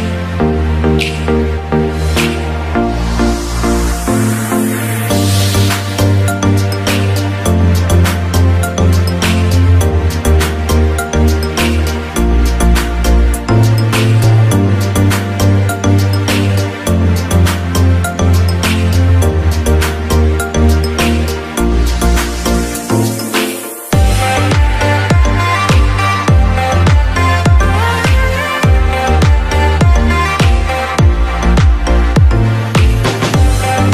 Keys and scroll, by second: 0.1 Delete, 1.9 Escape, 8.8 Escape, 20.3 ctrl+shift+], 32.2 Escape.